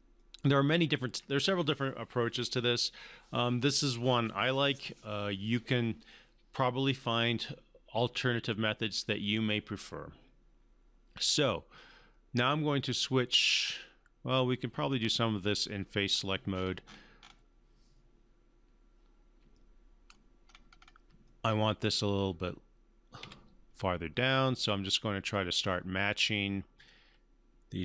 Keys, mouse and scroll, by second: 0.1-1.4 alt+middle drag, 14.4-15.3 click, 15.4 scroll down 1, 16.1 scroll up 1, 19.5-20.1 alt+middle click, 20.4-21.0 scroll up 2, 21.2-21.9 alt+middle drag, 23.2 w, 24.3-25.6 drag.